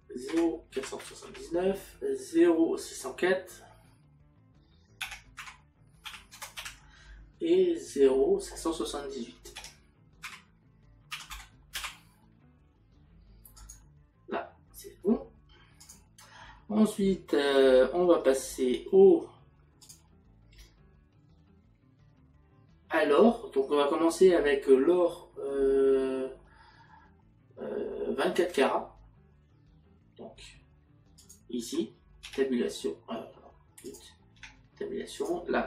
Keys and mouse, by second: 0.3 KP_Decimal, 5.5 KP_Decimal, 10.3 KP_Decimal, 13.6 click, 31.2 click, 32.3 Tab.